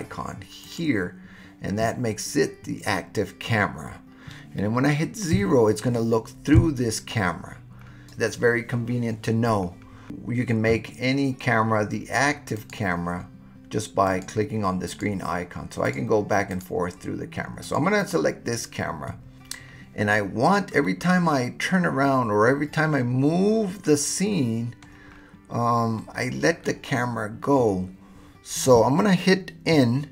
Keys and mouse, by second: 0.7 click, 5.3 KP_0, 12.5 click, 14.1 click, 14.9 click, 15.8 click, 16.5 click, 20.8-24.8 middle drag, 26.0-26.7 middle drag.